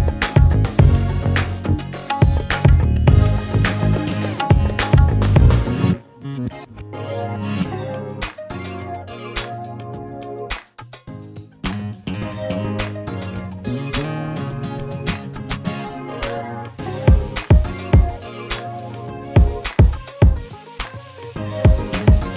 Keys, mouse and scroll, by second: 0.5 scroll, 0.7 shift+click, 1.7 click, 1.8 scroll, 2.3 click, 3.4 click, 3.9 click, 4.4 4, 4.5 Return, 5.0 scroll, 6.2 click, 7.0-8.3 scroll, 8.3 scroll down 5, 8.6-9.8 scroll down 22, 10.0 scroll up 1, 10.1-10.7 scroll, 11.0 click, 11.7 alt+scroll, 12.7 click, 13.1 scroll, 13.3 alt+middle click, 13.7-15.4 scroll, 15.8 scroll, 16.7 click, 19.0 shift+click, 19.6 alt+scroll, 20.0 alt+middle click, 21.2 click.